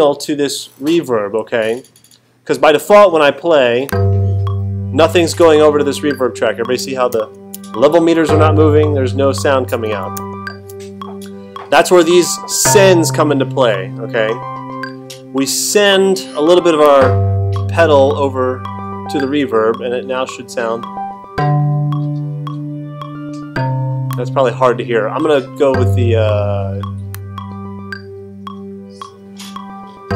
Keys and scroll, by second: 7.1 alt+super+8, 10.1 alt+super+8.